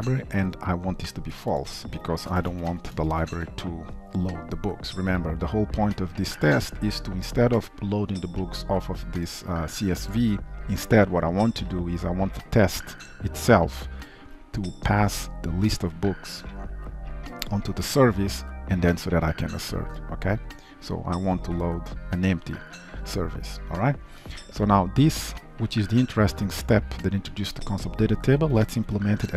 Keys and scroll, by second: 3.2 ctrl+s, 28.7 alt+Return.